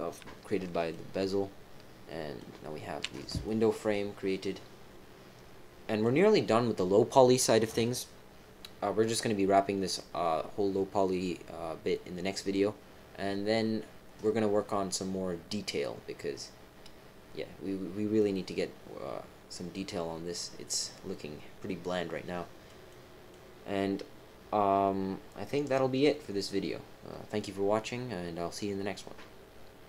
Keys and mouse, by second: 0.9-2.3 middle drag, 3.4-6.0 middle drag, 18.1-22.6 middle drag, 22.9 middle click, 23.0 click.